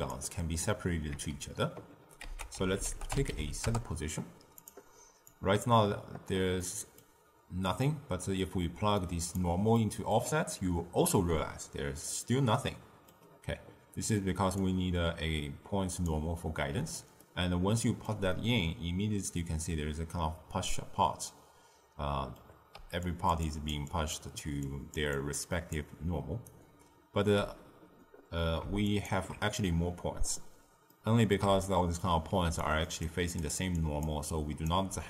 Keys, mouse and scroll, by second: 1.0 z, 2.2 ctrl+a, 5.2 click, 6.5-7.6 middle drag, 7.6 drag, 9.7-14.5 middle drag, 14.5 drag, 17.2-21.3 ctrl+middle drag, 22.7-27.2 typing, 23.0 click, 23.4 drag, 23.8 click, 24.6 click, 25.1-25.7 drag, 26.4 right click, 28.8 alt+shift+click, 30.9-32.4 middle drag, 32.4-34.7 typing, 32.5 click, 33.0 click, 33.7 drag, 34.2-34.6 drag.